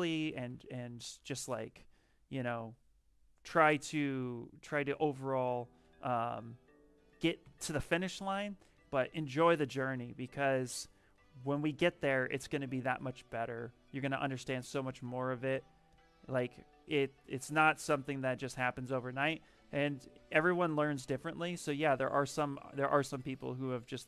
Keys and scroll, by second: 0.2 b, 5.7 f, 7.3 s.